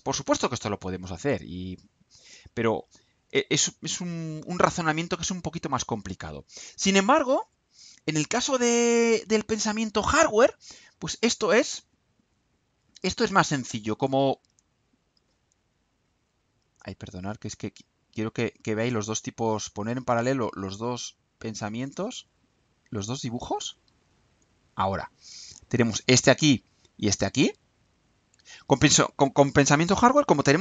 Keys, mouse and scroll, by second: 5.7-6.6 drag, 7.2-8.1 drag, 8.4-9.3 drag, 10.1-11.6 drag, 12.2 click, 13.2-14.2 drag, 15.0 click, 17.8 click, 22.2-23.5 drag, 23.9 click, 24.9-25.9 drag, 26.5 click, 27.2-29.7 drag.